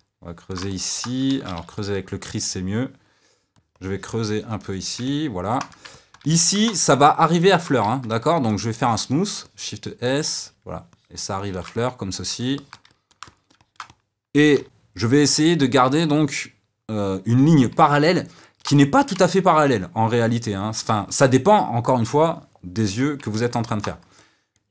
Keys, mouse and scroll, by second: 0.7 middle click, 1.3 shift+c, 1.5 f, 3.7-5.0 drag, 5.0-8.3 middle drag, 8.3-11.7 shift+drag, 11.7-24.1 middle drag, 24.1 click.